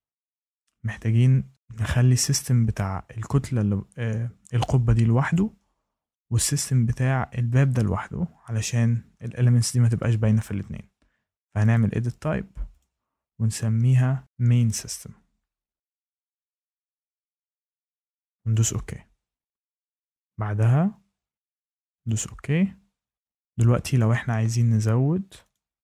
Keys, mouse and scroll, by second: 0.0 click, 1.5 click, 4.6 click, 6.0 click, 11.7 click, 12.7 click, 13.9 click, 14.0-16.0 typing, 16.9 click, 17.1 BackSpace, 17.6 BackSpace, 18.5 click, 22.0 click, 23.9 click, 24.8 6, 25.4 click.